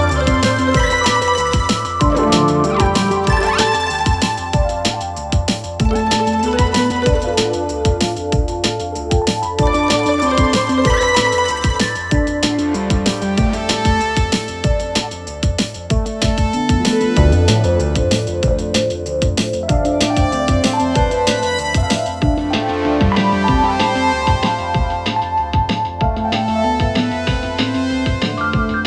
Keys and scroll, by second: 3.6 Delete, 6.2 4, 11.2 3, 16.2 shift+Left, 23.8 4, 24.1 3.